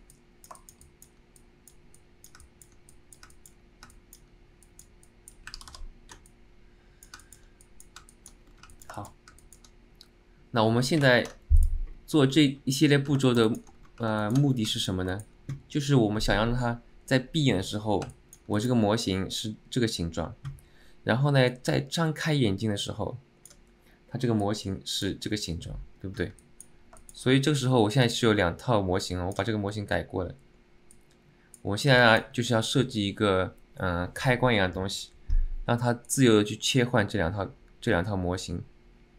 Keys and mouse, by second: 0.2 alt+middle click, 0.7 shift+middle click, 0.9 alt+middle click, 1.5 click, 2.1 middle click, 2.5 alt+middle click, 3.0 click, 3.4 alt+middle click, 4.1 middle click, 4.7 click, 5.2 click, 6.4 click, 6.4 middle click, 7.3 middle click, 7.7 click, 7.7 middle click, 8.2 alt+middle click, 8.8 alt+middle click, 8.8 c, 9.1 alt+shift+middle click, 9.5 alt+middle click, 13.3 shift+middle drag, 13.6 middle click, 14.3 alt+shift+middle click, 14.8 alt+middle click, 15.2 shift+middle click, 18.2 alt+middle click, 18.6 click, 21.7-23.7 drag, 24.6 click, 26.5 alt+middle click, 27.1 alt+shift+middle click, 28.2-29.6 drag, 31.1 click, 32.1 alt+middle click, 36.3-39.1 drag.